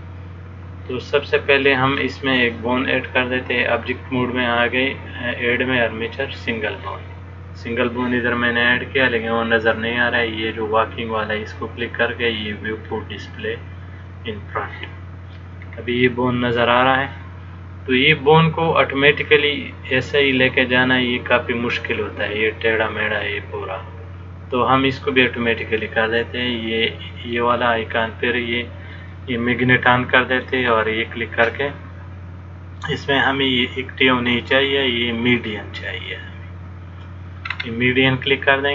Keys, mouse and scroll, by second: 4.7 click, 9.4 click, 12.6 click, 15.8-16.1 scroll down 1, 16.4-17.5 scroll down 3, 25.4 click, 29.3 click.